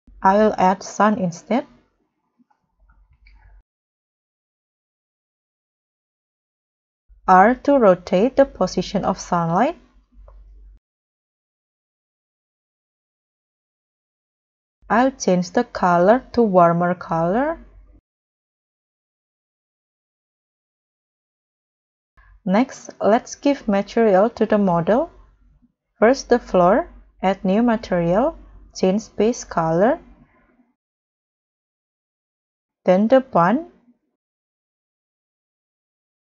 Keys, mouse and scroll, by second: 0.6 shift+a, 5.7 Return, 7.8 r, 13.9 KP_0, 21.1 g, 25.4-26.7 scroll down 9.